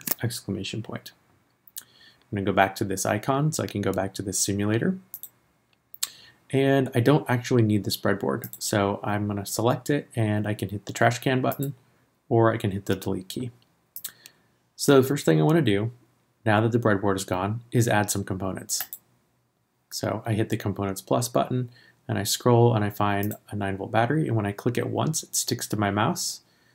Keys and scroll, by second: 0.0 shift+1.